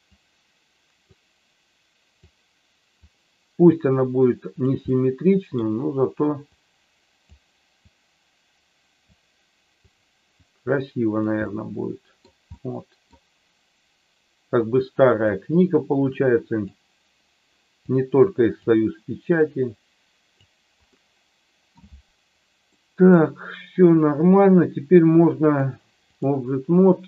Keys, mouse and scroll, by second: 0.0-1.1 drag, 2.2 click, 3.6-4.6 drag, 4.7 middle click, 6.5 click, 7.9-9.1 drag, 9.8 click, 10.3 click, 11.4 middle click, 12.5 middle click, 14.6 click, 15.6-16.6 drag, 17.7 click, 19.4-20.5 drag, 20.8 middle click, 22.8 middle click, 25.5 click.